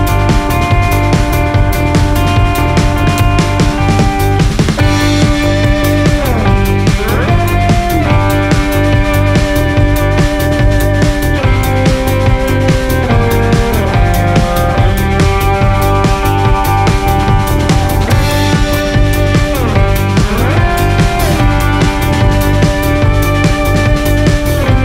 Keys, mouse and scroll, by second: 1.0 ctrl+shift+click, 1.9-5.5 drag, 8.2 scroll down 1, 10.4 click, 14.8 click, 15.3 click.